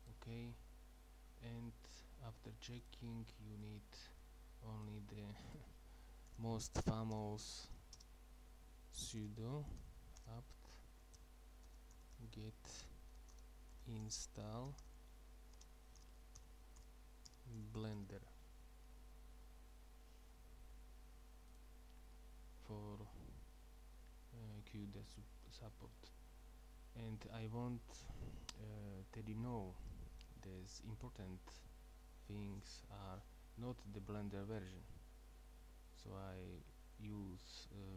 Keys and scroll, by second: 6.3-7.7 typing, 9.2-18.5 typing.